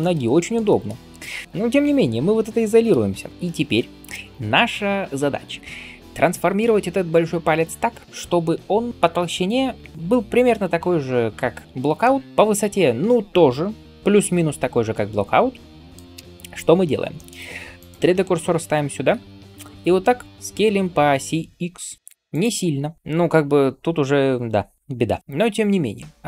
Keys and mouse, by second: 0.2-26.2 middle drag, 1.4 ctrl+s, 2.8 KP_Divide, 3.3 KP_7, 16.0 KP_7, 17.6 right click, 19.0 s, 24.8 s.